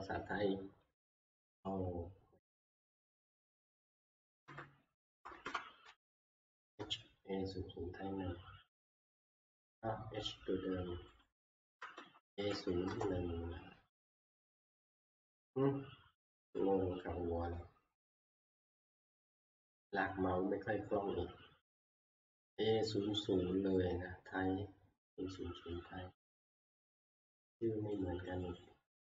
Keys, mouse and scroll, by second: 0.9 `, 1.7 click, 2.7 click, 2.8 •, 4.0 Left, 5.4 Left, 6.2 h, 8.7 BackSpace, 9.1 click, 9.4 click, 11.3 click, 12.0 BackSpace, 12.5 Delete, 12.9 Return, 13.1 Delete, 19.7 click, 20.2 scroll, 23.7-24.7 scroll, 27.9 click, 28.4 click, 28.6 click.